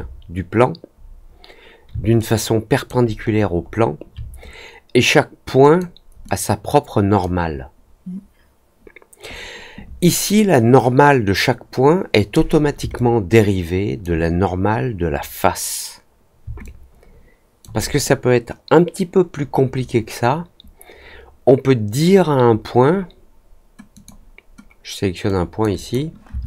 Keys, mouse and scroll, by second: 2.1-2.8 alt+drag, 3.2 alt+middle click, 3.6 alt+middle click, 5.5 click, 6.2-7.1 drag, 12.9-13.9 alt+drag, 16.6 alt+click, 23.9 click, 25.2 click, 25.7 click.